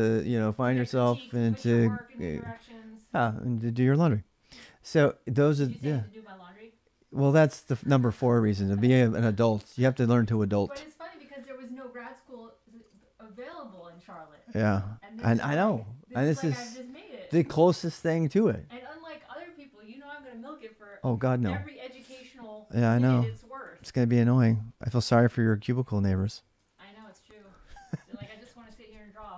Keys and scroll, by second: 12.5 ctrl+[, 13.0-14.6 typing, 22.7-23.9 typing, 24.9 ctrl+[, 25.1 k, 26.3 ctrl+[, 26.4 ctrl+j, 26.5-27.9 typing.